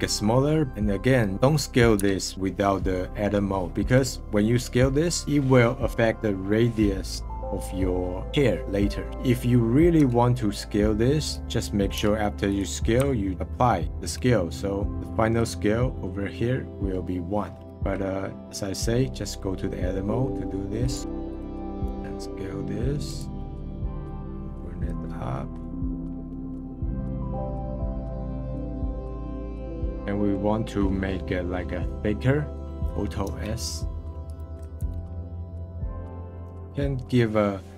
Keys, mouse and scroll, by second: 0.7 middle click, 1.3 s, 1.9 s, 11.9 s, 13.3 ctrl+a, 14.9-15.9 drag, 17.9 ctrl+z, 20.8 click, 23.4 middle click, 24.0-25.1 drag, 25.1 scroll up 2, 26.0 scroll up 2, 26.9 middle click, 27.1 click, 27.4 middle click, 27.7 scroll up 3, 27.7 s, 28.1 s, 28.3 middle click, 28.5 click, 29.5 click, 29.9 alt+s, 30.1-33.2 middle drag, 33.2 alt+s, 34.7 alt+s, 36.3-37.7 middle drag.